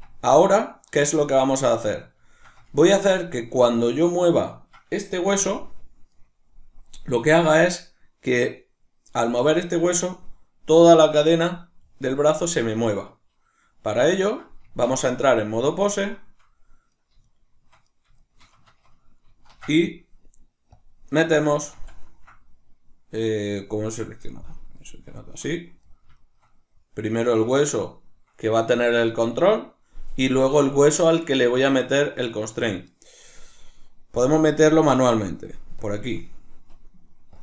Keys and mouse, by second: 2.3-6.3 shift+middle drag, 5.3 g, 6.3 right click, 9.4 g, 10.0 right click, 14.1-16.0 ctrl+middle drag, 14.6 Tab, 16.0 shift+right click, 16.9 right click, 17.3 shift+right click, 17.9 right click, 18.2 shift+right click, 19.3 ctrl+shift+c, 21.8 ctrl+z, 24.8 right click, 25.2-26.0 shift+right drag, 26.0-30.1 shift+middle drag, 30.1 right click.